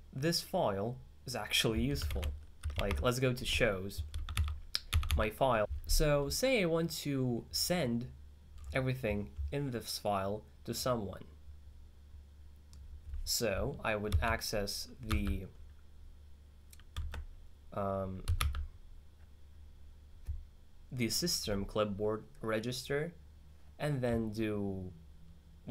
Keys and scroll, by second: 3.0 alt+5, 4.4 z, 5.0 z, 5.1 z, 15.2 q, 18.1-19.0 typing.